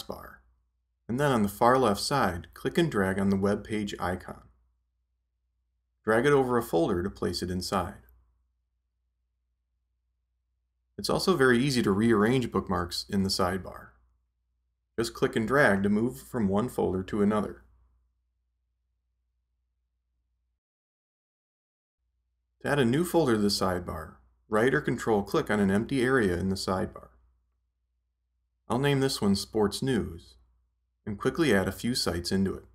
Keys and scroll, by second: 28.8-31.0 typing.